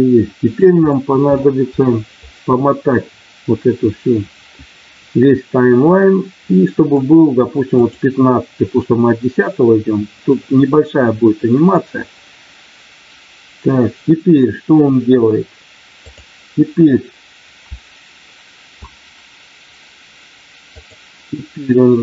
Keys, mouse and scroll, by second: 7.7 click, 15.9 click, 18.1-18.7 a, 20.7 click.